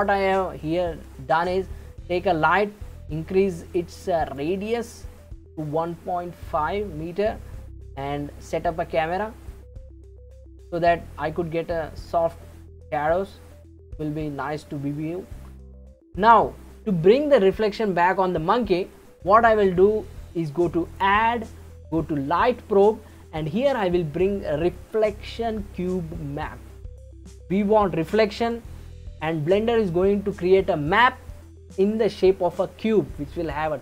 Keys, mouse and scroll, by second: 0.5-1.3 scroll down 4, 2.0 click, 4.3 click, 9.5-10.4 middle drag, 10.4 scroll up 3, 13.5-14.1 scroll up 1, 14.1 scroll up 1, 15.3-19.1 shift+middle drag, 20.9-24.0 drag.